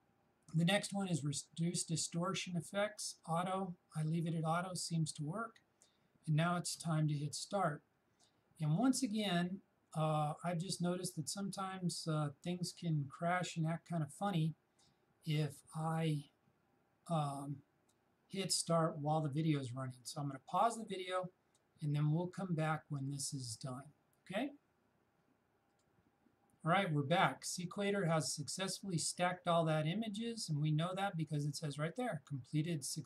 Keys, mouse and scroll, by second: 1.1 shift+click, 25.7 shift+click.